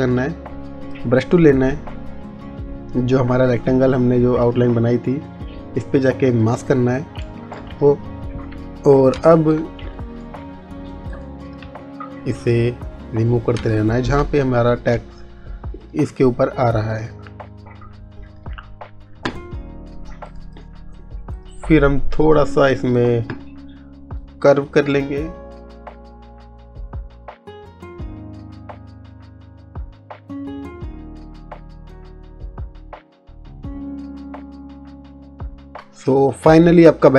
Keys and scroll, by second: 9.3 space, 13.8 space, 35.7 space.